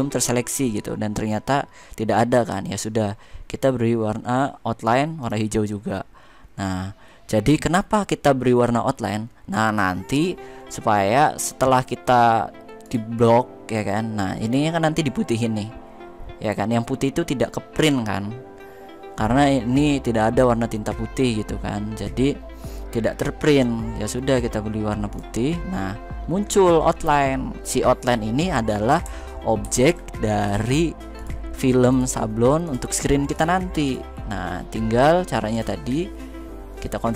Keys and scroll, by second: 29.4 ctrl+f.